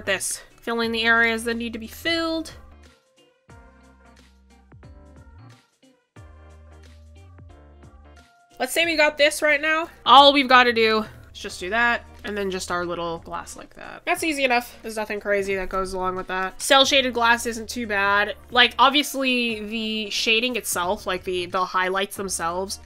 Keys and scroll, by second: 3.7 ctrl+z, 13.3 ctrl+z.